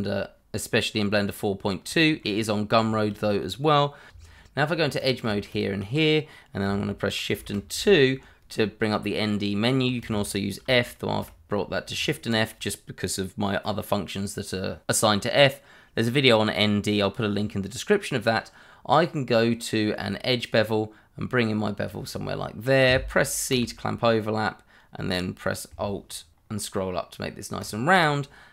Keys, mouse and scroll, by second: 2.2 shift+middle click, 2.4 middle click, 2.6 scroll up 1, 3.3 shift+middle click, 3.5 middle click, 4.1 Tab, 5.0 click, 5.5 shift+click, 7.3 shift+2, 10.0 Escape, 11.0 shift+f, 20.4 click, 23.5 c, 26.9-27.8 alt+scroll up 1, 27.8 alt+click, 28.0 click.